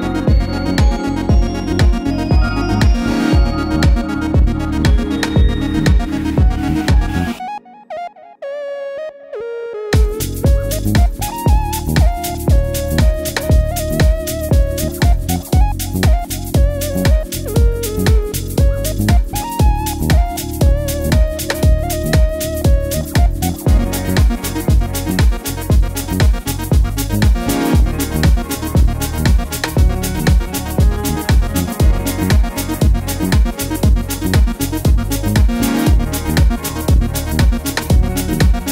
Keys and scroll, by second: 0.0 typing, 12.3 super+c, 12.4 super+v, 17.5 super+z, 17.6 super+z, 23.5 BackSpace, 24.1 super+c, 24.2 super+v, 26.8-28.7 typing.